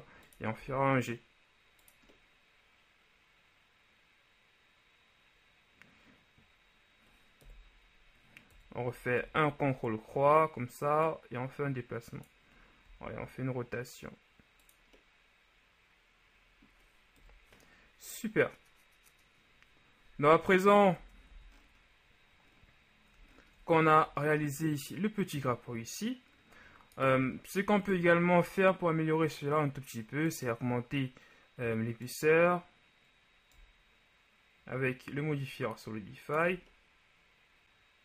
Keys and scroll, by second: 7.6 KP_1, 8.6 KP_3, 9.2 KP_3, 13.0 r, 17.4 KP_1, 21.1 Tab, 21.4 a.